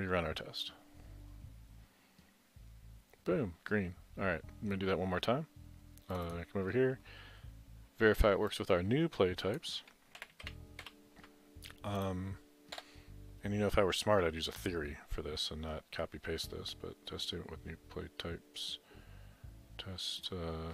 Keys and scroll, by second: 10.2 ctrl+c, 10.5 ctrl+v, 12.8 Return.